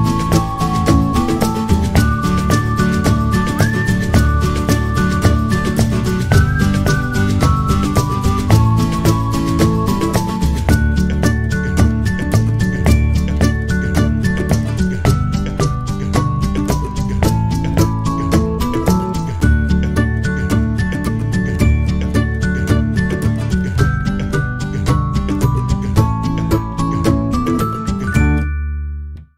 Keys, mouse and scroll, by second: 0.5 click, 1.4 click, 2.3 click, 3.5 click, 4.4 click, 5.2 click, 8.0 alt+click, 8.7 shift+a, 10.3 s, 11.1 s, 12.6 g, 13.8 alt+click, 14.0 click, 14.7 click, 15.2-15.7 scroll down 4, 15.8 click, 16.6 click, 22.6 click.